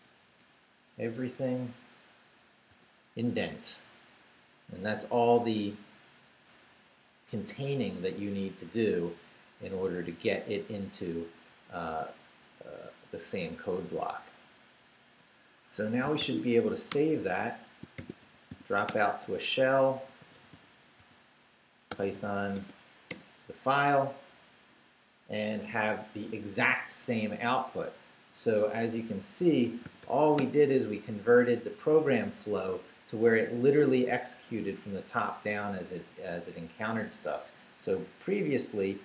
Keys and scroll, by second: 0.0 Down, 1.3 shift+Down, 2.7 shift+., 15.7 Escape, 16.2 shift+;, 16.5 shift+w, 16.9 Return, 17.7-22.6 typing, 23.1 Return, 29.2-30.5 typing, 33.5 Up, 34.2 Down, 36.1 Up, 38.5 Down.